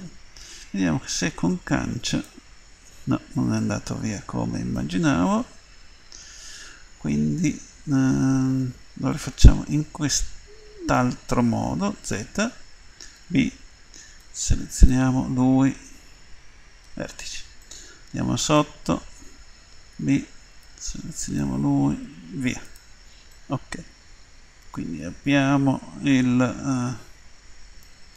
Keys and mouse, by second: 1.4 Delete, 4.0-6.1 middle drag, 9.2-11.1 middle drag, 12.0 z, 13.1 b, 15.8 Delete, 17.6 middle click, 19.9 b, 22.0 Delete, 23.3 click.